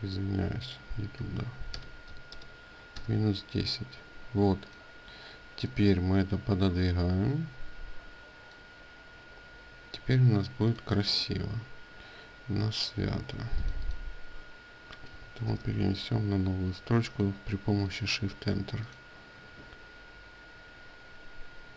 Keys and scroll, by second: 2.6 Return, 15.1 Return.